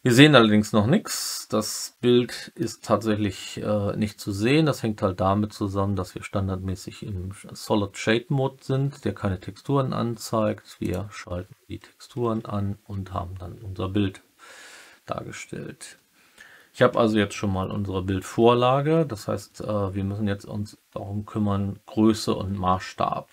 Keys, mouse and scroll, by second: 1.0-2.5 alt+middle drag.